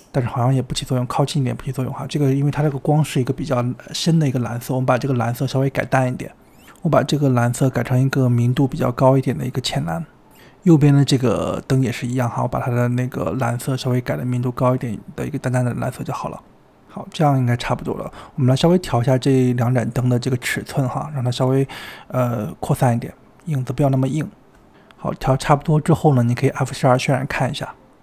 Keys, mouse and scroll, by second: 1.8-3.1 middle drag, 3.1 KP_3, 3.8 shift+middle click, 4.3 g, 8.0 click, 11.2 drag, 12.0 click, 14.5 click, 17.1-17.8 middle drag, 17.8 KP_7, 18.0 scroll down 1, 18.1-18.6 shift+middle drag, 18.6 r, 18.9 g, 19.7 s, 20.5 click, 21.0 click, 21.9 s, 22.6 g, 23.2 s, 24.8-25.9 drag, 25.9 g.